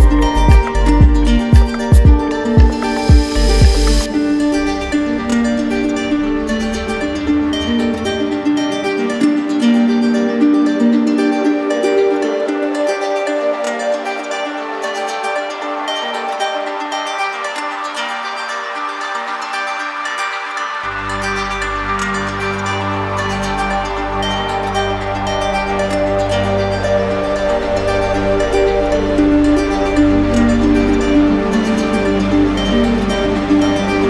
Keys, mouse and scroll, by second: 0.9 alt+click, 2.4 click, 4.4 click, 5.3 click, 7.3 click, 7.9 alt+click, 9.5 click, 10.2 shift+click, 11.2 alt+click, 12.4 click, 13.3 click, 13.7 shift+click, 14.4 shift+click, 14.9 alt+click, 16.1 click, 16.8 alt+click, 21.6 alt+click, 22.4 click, 25.0-26.2 drag, 26.8-27.8 drag.